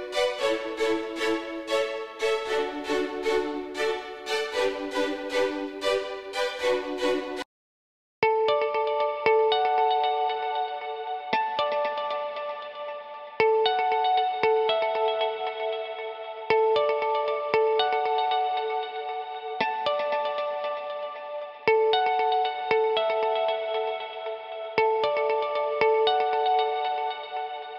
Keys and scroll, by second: 4.2 e, 7.1 s.